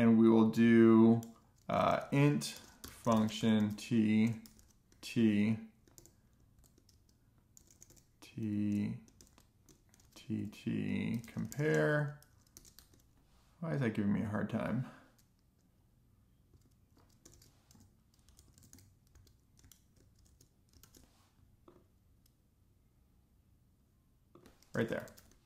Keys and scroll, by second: 0.0-1.5 typing, 3.3-9.7 typing, 11.1-14.6 typing, 18.3 a, 19.0 BackSpace, 19.1 space, 19.5 Right, 20.0 Left, 20.1-20.8 typing, 20.3 Right, 21.9 Left, 22.0 space, 22.5 alt+shift+f.